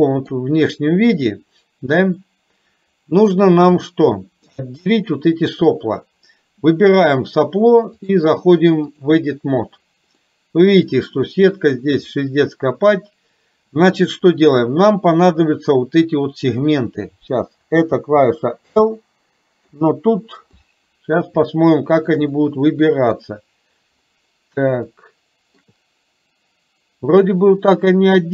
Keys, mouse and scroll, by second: 2.3-3.4 middle drag, 2.3-3.0 scroll up 1, 4.1 shift+middle click, 4.9 click, 8.2-9.3 drag, 9.9 middle click, 10.3 middle click, 18.0 l, 19.0-20.0 middle drag, 20.7 middle click, 21.5 shift+middle click, 22.3-23.3 middle drag, 25.1 shift+middle click, 27.7-28.3 middle drag, 27.7-28.0 scroll up 1.